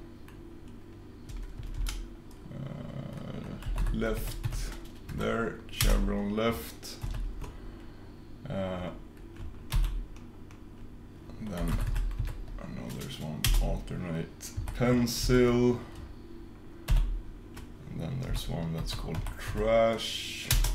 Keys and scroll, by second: 9.9 super+i.